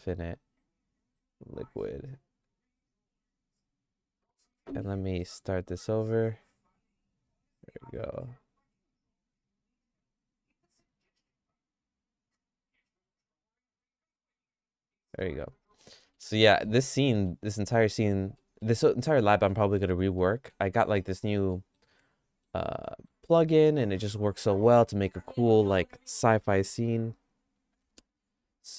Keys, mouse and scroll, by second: 1.7 click, 6.2 click, 15.0 click, 15.9 middle click, 16.3 middle click, 16.6 shift+middle click, 17.7 middle click, 18.4 middle click, 19.2 middle click, 20.2 middle click, 21.5 middle click, 22.0 shift+middle click, 22.7 middle click, 23.5 middle click.